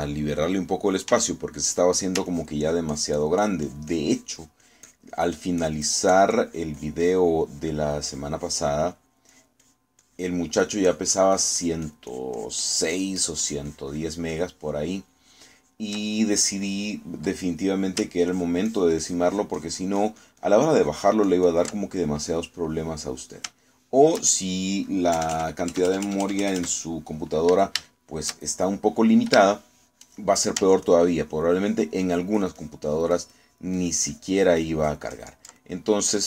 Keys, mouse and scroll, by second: 2.2 f, 2.6 click, 3.4-8.4 ctrl+drag, 12.8-17.0 ctrl+drag, 17.9 middle click, 18.5 middle click, 19.4-22.8 ctrl+drag, 22.8-24.0 ctrl+middle drag, 24.0 middle click, 24.7 shift+middle click, 25.4 shift+middle click, 26.2 KP_Add, 28.9-30.1 shift+middle drag, 30.5 shift+middle click, 31.9-36.2 ctrl+drag.